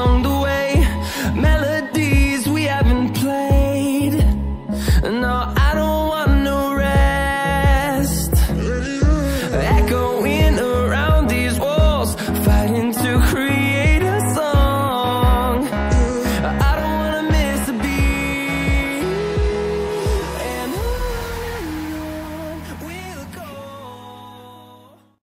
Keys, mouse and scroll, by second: 0.1-2.1 typing, 2.5 click, 11.8 scroll down 1, 12.2 click.